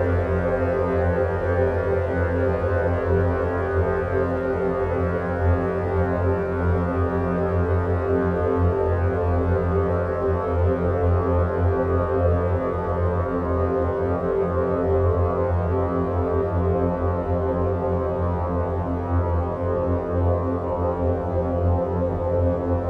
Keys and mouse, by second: 1.6-2.3 drag, 3.2 shift+click, 4.0-4.5 shift+drag, 5.1 shift+click, 5.8-6.6 middle drag, 7.4-8.0 shift+drag, 9.0-9.5 shift+drag, 9.8-10.2 middle drag, 10.8-11.3 middle drag, 13.1 alt+e.